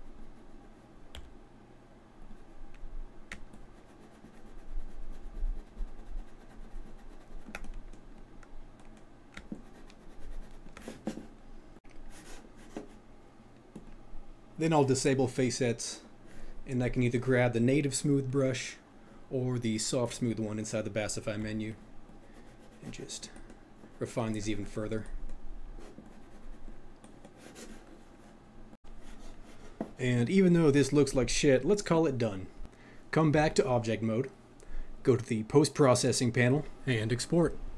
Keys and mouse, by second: 3.5 ctrl+click, 8.7 middle click, 13.8 click, 16.9 click, 23.3-28.8 middle drag, 33.5 click, 35.7 click.